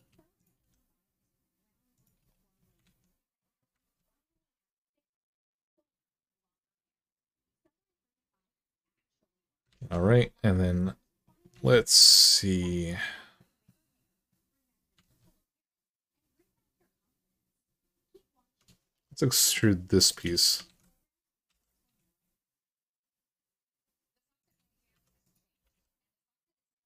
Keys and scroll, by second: 0.4 g, 2.6 alt+z, 3.6 alt+z, 9.6 alt+z, 11.3 alt+z, 14.8 alt+z, 18.8-19.6 typing, 20.4 alt+z, 21.2 e, 24.7-25.9 typing.